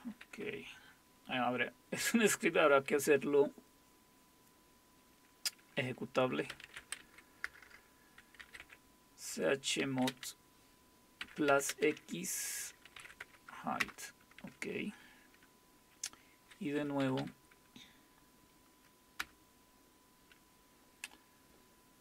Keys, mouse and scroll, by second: 6.7-10.1 typing, 11.2-13.6 typing, 13.8 Return, 19.2 Return.